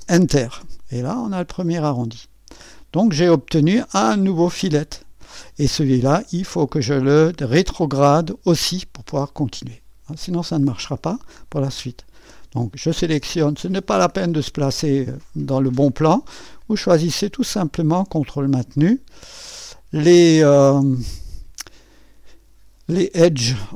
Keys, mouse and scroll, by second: 2.6 click, 8.2 click, 11.0 right click, 12.0-13.2 scroll up 1, 13.2 click, 17.2 click, 20.3 click.